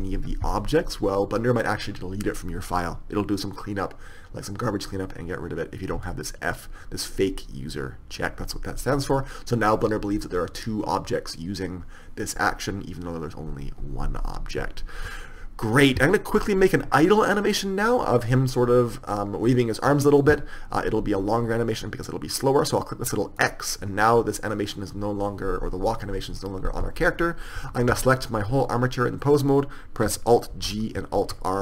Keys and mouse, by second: 23.8-28.0 drag, 28.0 a, 28.2 a, 30.8 alt+g, 31.5 alt+r.